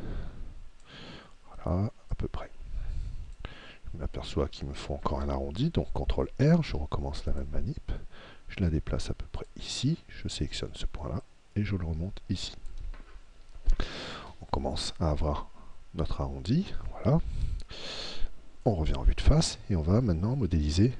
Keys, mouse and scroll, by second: 2.1 click, 6.1 ctrl+r, 9.4-13.2 drag, 10.3 right click, 14.9-16.7 middle drag, 18.7 KP_1.